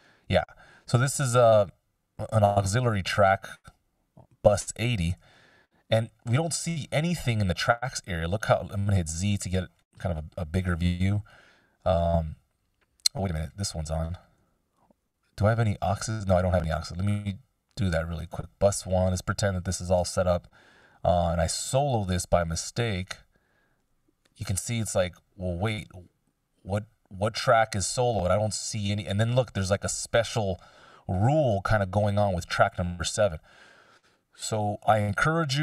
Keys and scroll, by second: 5.3 x, 9.1 z, 15.1 x, 22.4 x.